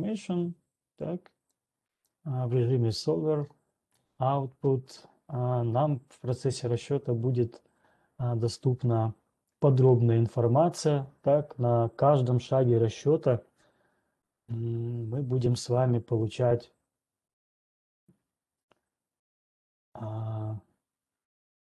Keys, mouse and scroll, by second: 2.4 click, 4.9-5.4 scroll.